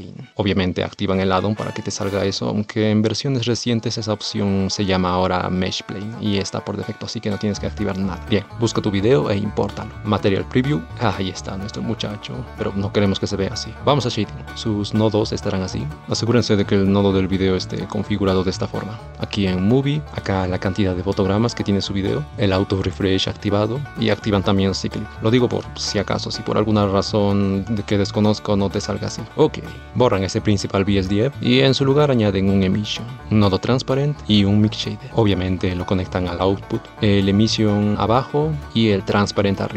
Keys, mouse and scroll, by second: 2.5 shift+a, 10.9 space, 16.1 middle click, 18.0-19.1 middle drag, 19.1 click, 29.0 middle click, 30.5 x, 36.9-39.7 drag.